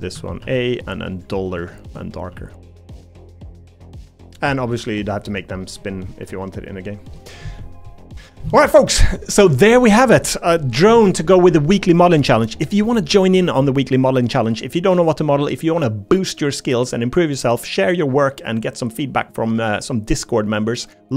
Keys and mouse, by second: 0.1 a, 0.4 g, 1.8 shift+middle click, 2.3 g, 3.5 middle click, 5.4 middle click, 5.8 middle click, 7.3 middle click, 9.2 shift+middle click, 10.2-11.7 middle drag, 12.4 middle click, 13.4-14.7 middle drag, 15.1-20.0 middle drag, 20.7 middle click.